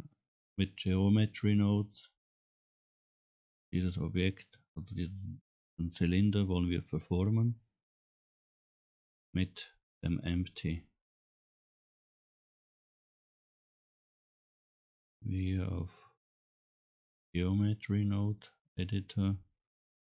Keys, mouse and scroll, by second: 4.3 scroll up 1, 14.4-15.9 drag, 16.3-18.4 drag, 20.0 n.